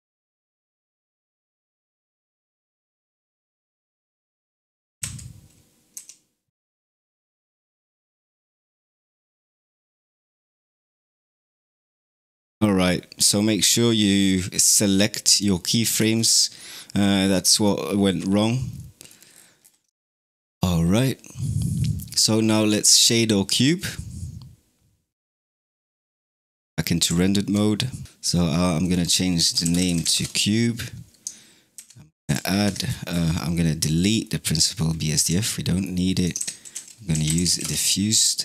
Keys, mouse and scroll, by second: 0.1 t, 0.8 click, 0.8 right click, 1.2 click, 3.2-3.6 drag, 3.2 right drag, 3.6 right click, 3.8 click, 4.9 a, 5.8 t, 8.4 middle click, 14.6-15.8 drag, 15.8 space, 18.6-19.2 middle drag, 19.2-19.6 scroll down 9, 19.8-22.4 shift+middle drag, 22.4 click, 26.1 click, 26.9 z, 28.0 scroll down 3, 28.7-31.6 drag, 31.6 shift+a, 32.7-33.1 scroll down 12, 33.1 scroll up 1, 33.2-33.8 middle drag, 33.8 click, 34.1-34.6 middle drag, 34.6-35.0 scroll up 5, 35.0 x, 35.5-36.0 middle drag, 36.0 click, 36.2 shift+a, 37.3 f.